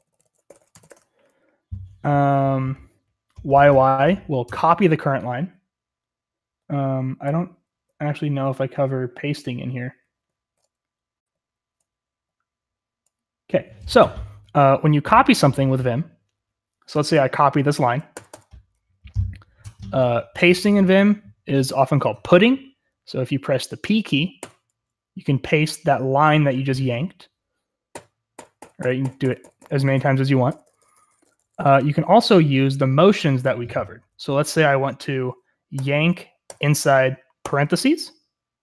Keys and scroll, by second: 0.0-2.9 typing, 5.2-13.5 typing, 18.1 typing, 24.4 p, 27.9-32.0 typing, 34.0-34.3 typing, 35.7-38.6 typing.